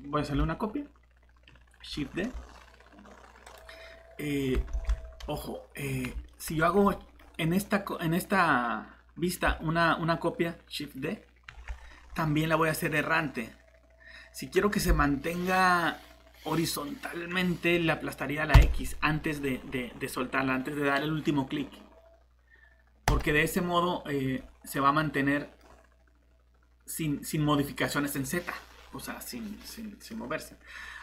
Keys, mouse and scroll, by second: 3.4 click, 4.3 scroll down 1, 4.7 ctrl+shift+z, 5.2 middle click, 5.8 scroll up 1, 6.3 middle click, 6.5 scroll down 1, 6.8 middle click, 9.9 typing, 11.6 typing, 18.4-19.1 typing, 23.1 click, 24.4 middle click.